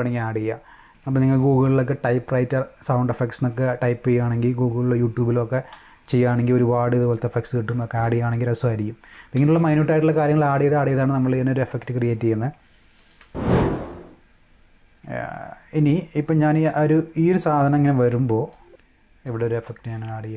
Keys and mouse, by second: 7.0 click, 13.0 click, 18.5 click, 19.2-20.3 drag.